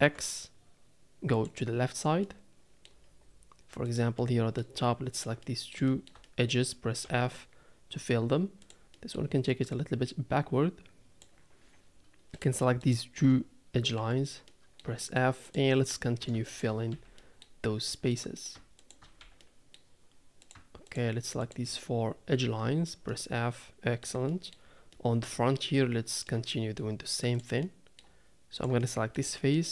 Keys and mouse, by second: 0.0 e, 2.2 middle click, 4.2 middle click, 5.1 shift+click, 5.4 middle click, 5.6 click, 5.9 shift+middle click, 6.2 middle click, 7.0 f, 8.6 click, 8.9 middle click, 9.8-11.2 drag, 12.8 shift+click, 13.9 f, 14.5 middle click, 15.0 shift+middle click, 15.4 click, 16.5 shift+click, 16.9 f, 17.2 middle click, 17.9 middle click, 18.1 click, 18.4 click, 19.4 f, 19.4 middle click, 20.4 click, 21.4 shift+click, 22.3 f, 23.1 click, 23.3 middle click, 23.6 middle click, 24.3 middle click, 24.9 middle click, 25.7 middle click, 26.5 shift+middle click, 27.3 click, 27.6 middle click, 28.6 click, 28.8 shift+middle click, 29.4 middle click.